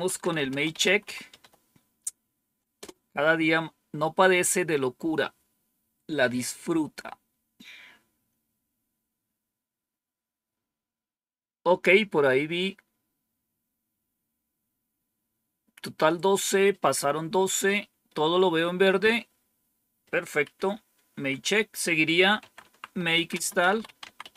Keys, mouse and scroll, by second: 0.0-1.8 typing, 2.7 Return, 18.8-20.0 scroll down 2, 20.4 Up, 21.0 Down, 22.0-24.3 typing.